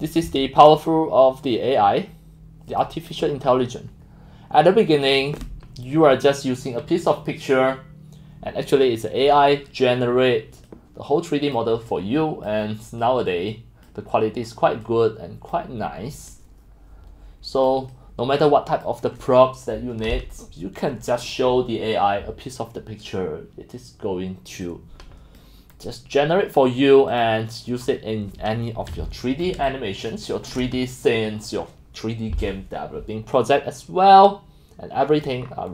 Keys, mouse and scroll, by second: 0.7 click, 1.4 click, 1.8 click, 2.7 click, 7.1-7.4 drag, 9.4-9.8 drag, 10.0 drag, 10.7-11.6 drag, 11.9 click, 13.1-13.7 drag, 14.1-14.5 scroll, 15.1-15.5 drag, 16.3-17.7 drag, 17.9-18.9 drag, 21.0-21.3 drag, 24.8-25.4 drag, 25.6 drag, 26.5 click, 27.2 click, 28.0 scroll, 29.0 click, 29.0 x, 29.6-30.3 c, 29.6 click, 30.3 right click, 30.3 c, 30.9-34.3 drag, 34.9-35.3 drag, 35.4 scroll.